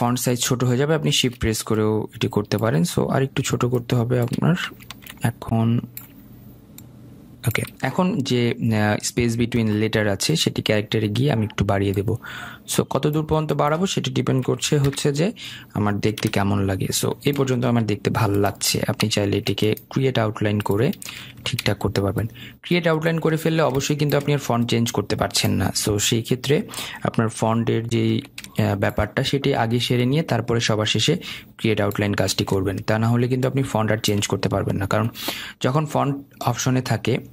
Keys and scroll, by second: 16.9 Return, 28.8 ctrl+g.